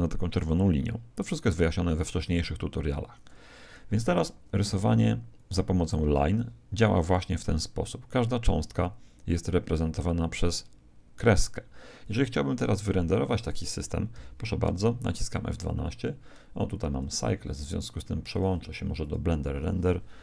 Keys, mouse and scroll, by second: 2.8 Escape, 4.0 alt+a, 6.0 alt+a, 12.6 KP_0, 17.4 F12, 17.4 Escape, 18.3 click.